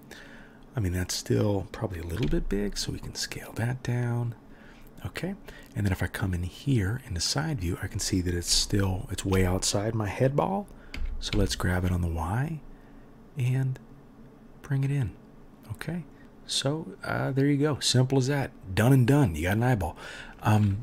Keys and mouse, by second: 2.2 s, 7.0 click, 7.1-20.8 middle drag, 10.9 g.